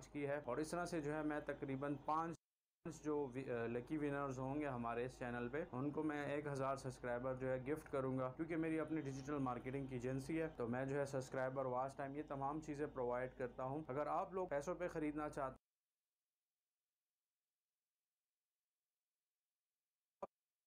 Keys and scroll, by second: 2.7 space, 15.9 space.